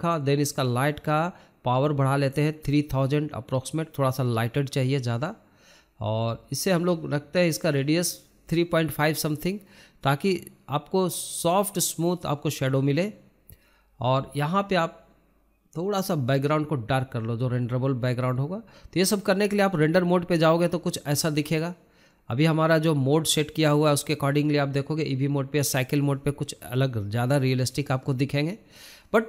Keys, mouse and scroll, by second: 20.8 scroll up 3, 21.3-21.6 scroll down 1, 21.6-22.4 scroll up 1, 23.6-29.2 drag.